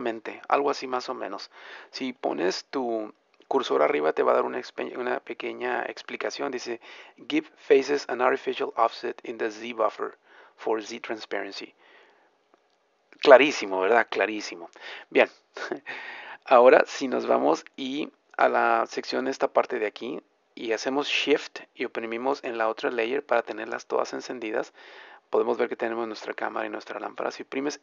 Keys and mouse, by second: 2.3-14.7 middle drag, 15.7-27.8 middle drag.